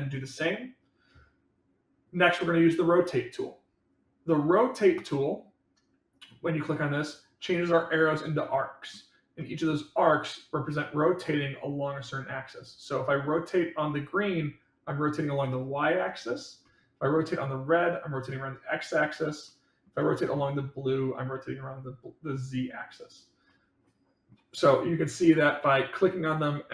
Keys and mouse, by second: 7.4-8.9 middle drag, 9.3-9.6 middle drag, 16.6-17.0 middle drag, 19.4-19.8 middle drag, 20.0-20.3 middle drag, 23.4 middle click, 25.7-26.7 drag.